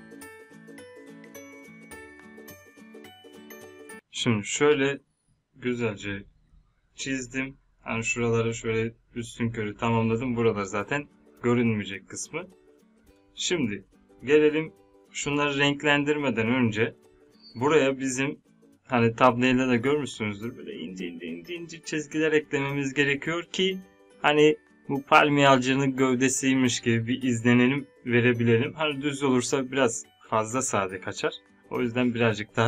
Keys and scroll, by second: 1.8 ctrl+Num_Lock, 1.9 z.